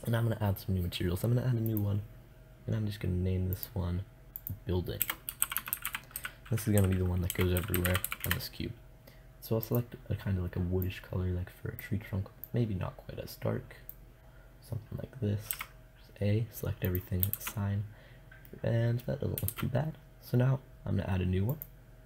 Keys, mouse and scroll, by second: 1.1-3.3 drag, 15.0 a, 16.8 shift+z, 17.6 click, 18.9 shift+z, 21.0-22.0 drag.